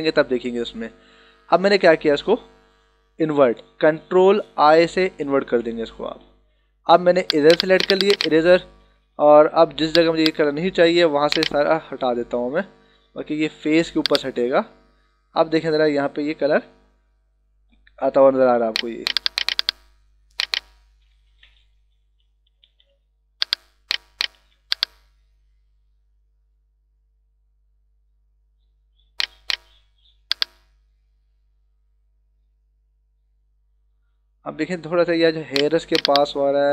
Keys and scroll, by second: 5.1 ctrl+i, 9.1 ], 12.4 ctrl+alt+z, 21.2 ctrl+=, 24.3 [, 36.1 [.